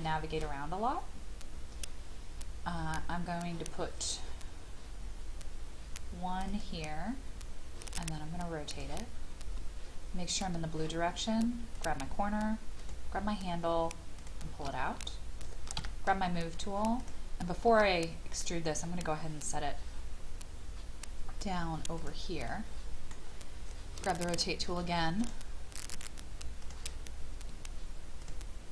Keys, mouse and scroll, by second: 6.5 click, 11.7 shift+click, 12.8 shift+click, 14.2 shift+click, 15.7 m, 17.0 click, 21.9 click, 22.5-24.0 middle drag, 25.2 click, 28.2 shift+click.